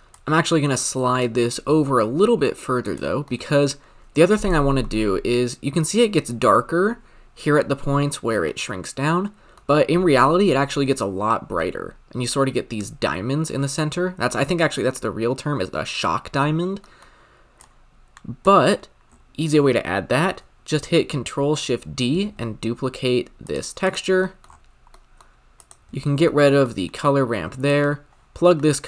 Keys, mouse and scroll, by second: 0.0 middle click, 0.0-1.1 drag, 4.8-5.4 scroll up 5, 8.4-11.6 shift+middle drag, 17.6-18.4 drag, 22.1 ctrl+shift+d, 23.8 click, 24.2 middle click, 24.6-25.2 scroll up 8, 25.2 middle click, 25.6 click, 25.8 x, 26.2 scroll down 5, 26.3-27.6 middle drag, 27.6-28.0 drag.